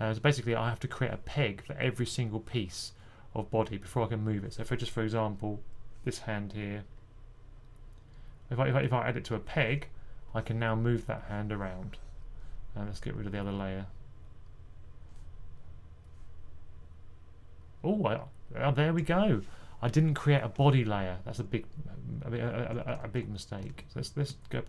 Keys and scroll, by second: 22.9 super+z, 23.5 super+z, 24.1 super+z.